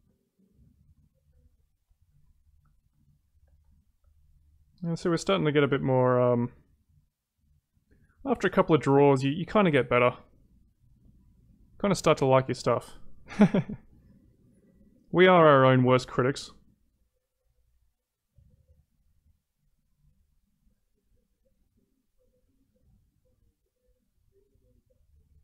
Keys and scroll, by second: 10.1 ctrl+z.